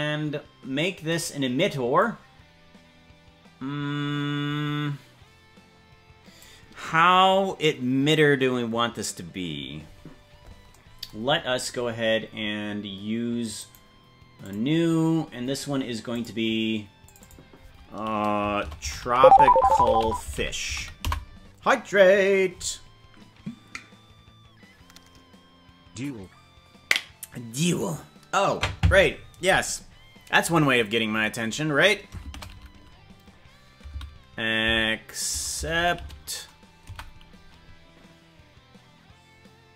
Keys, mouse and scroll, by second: 1.0 click, 1.9-6.4 drag, 11.2-12.0 scroll down 10, 13.6-14.6 right drag, 15.2-15.6 scroll down 2, 16.0 click, 17.0 click, 17.2-29.5 drag.